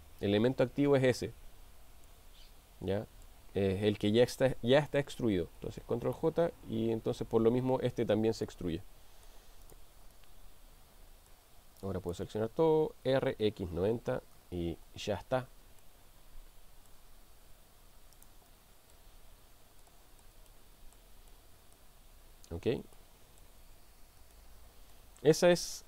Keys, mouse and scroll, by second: 2.2-3.4 middle drag, 6.2 ctrl+j, 8.6-9.3 middle drag, 9.6 click, 10.4-11.5 middle drag, 11.8 click, 13.0 r, 13.4 x, 14.0 9, 14.0 0, 14.4 Return, 16.1-17.1 middle drag, 17.5 g, 18.8 middle click, 19.9-20.3 shift+middle drag, 20.5-21.0 middle drag, 21.3-21.9 middle drag, 23.0-23.6 shift+middle drag, 24.3 shift+middle click.